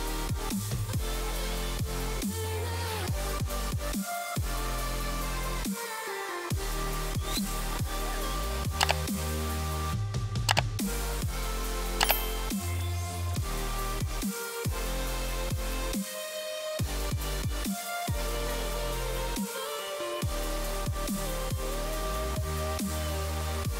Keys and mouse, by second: 0.9 click, 2.7 ctrl+z, 3.6 click, 4.1 click, 4.6 click, 5.3 click, 5.7 ctrl+z, 5.9 click, 6.4 click, 6.8 space, 7.0 click, 7.3 click, 7.8 click, 9.7 ctrl+z, 14.4 click, 15.0 click, 16.0 click, 16.4 click, 17.1 click, 17.6 click, 18.4 click, 18.7 click, 20.1 click, 21.7 click, 22.7 click.